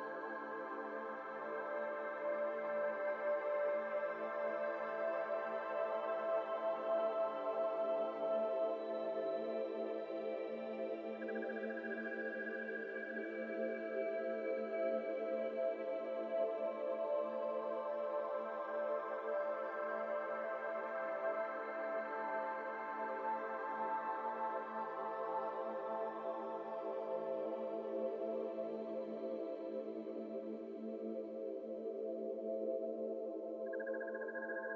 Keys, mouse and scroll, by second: 0.4 p, 1.0 Tab, 1.4 alt+click, 1.8 click, 2.1 click, 2.7 ctrl+z, 3.0 Tab, 3.4 shift+middle click, 3.5 a, 4.1 1, 4.8 s, 7.5 scroll down 2, 7.6 middle click, 7.9 alt+z, 8.1 scroll down 1, 8.1-9.5 shift+middle drag, 9.5 e, 9.9-10.9 s, 11.7 a, 12.0 e, 13.9 middle click, 14.6 scroll down 2, 14.7-17.2 middle drag, 17.2 alt+z, 17.7 alt+click, 18.1 alt+click, 18.5 alt+click, 18.6 alt+z, 19.3 f, 19.7 middle click, 19.9 Tab, 20.1-20.6 scroll down 2, 20.1-20.5 middle drag, 20.6-21.7 middle drag, 21.7 Tab, 21.8 middle click, 22.0-22.4 scroll up 1, 22.4 alt+z, 22.6 middle click, 23.2 scroll up 1, 23.5 alt+z, 23.8 3, 24.0 click, 24.4 shift+click, 24.9-26.3 middle drag, 27.4 click, 28.0 shift+click, 28.7 ctrl+r, 30.5 3, 30.8 click, 31.1 shift+click, 31.8 i, 33.3-34.7 right drag.